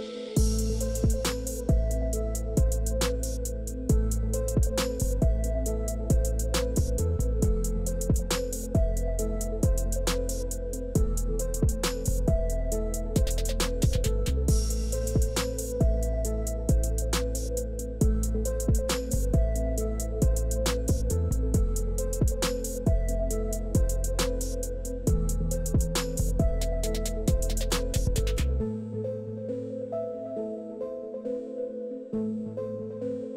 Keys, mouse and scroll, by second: 2.2 middle click, 2.5 middle click, 4.0-6.3 drag, 6.5 middle click, 7.6-13.5 drag, 13.7 middle click, 15.4 click, 16.6 middle drag, 18.4 click, 19.0 KP_0, 19.2 KP_3, 19.4 Return, 20.9 click, 25.6 click, 27.4 click, 28.7 click, 29.6 click, 30.9 click, 31.5 click.